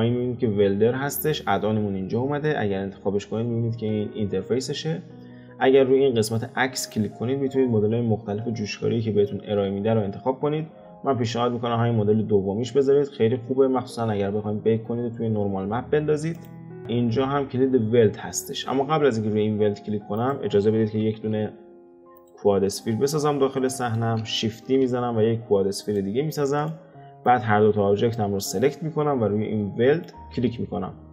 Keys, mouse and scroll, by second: 6.8-10.0 drag, 20.1 click, 21.0 shift+a, 23.6-24.5 shift+middle drag, 24.5 shift+d, 26.6 click, 27.2 click, 29.9-31.1 drag.